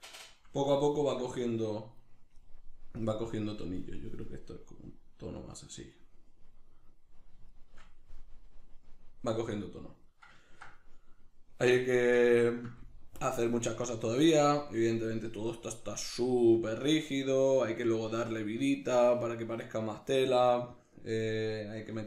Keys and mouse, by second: 1.4 right click, 3.0-7.0 drag, 7.6-22.0 shift+middle drag.